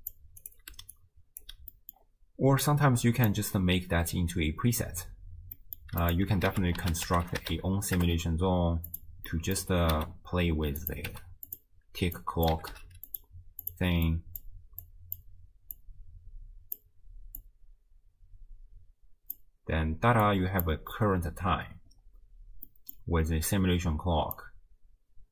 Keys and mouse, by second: 0.8 d, 0.9 click, 1.4 d, 1.5 d, 1.8 middle click, 2.6 click, 5.6 middle click, 6.1 click, 6.5 ctrl+a, 9.3 middle click, 9.9 n, 10.8 click, 11.1 n, 11.5 click, 12.2-13.7 drag, 12.9 d, 14.1 click, 14.9 click, 15.8-16.9 drag, 17.4-19.4 drag, 20.3 click, 22.7 middle click, 24.5-25.3 drag.